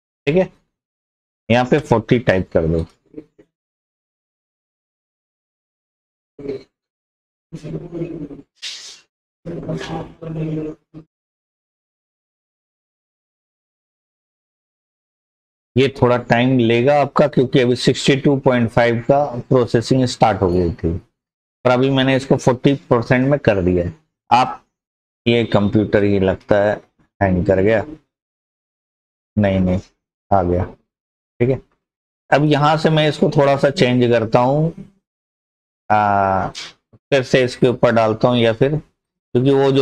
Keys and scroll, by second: 1.4-1.7 typing, 4.6-4.9 typing.